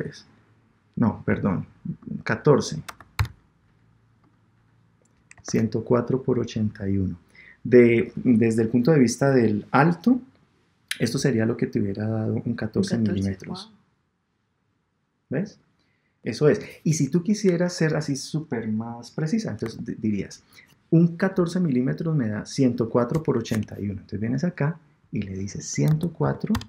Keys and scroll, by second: 5.4 super+Tab, 19.6 super+Tab, 23.7 super+Tab.